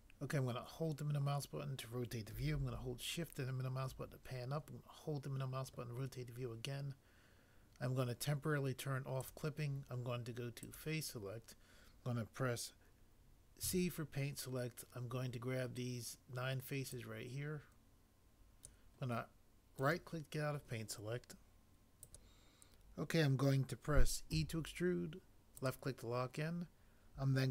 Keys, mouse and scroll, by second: 13.6 c, 24.3 e.